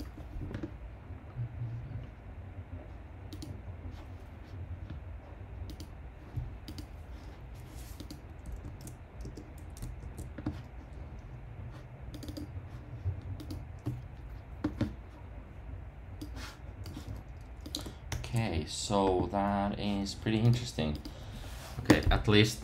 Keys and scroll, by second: 8.6 super+v, 9.2 Tab, 18.1 super+r.